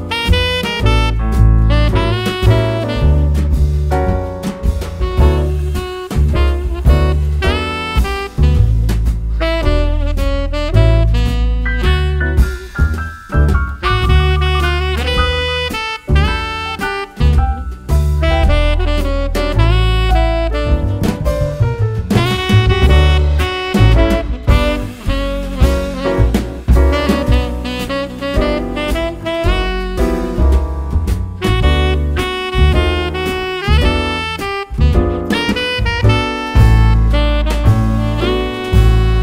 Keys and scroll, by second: 1.6 d, 5.1 super+c, 5.5 super+v, 21.4 super+g.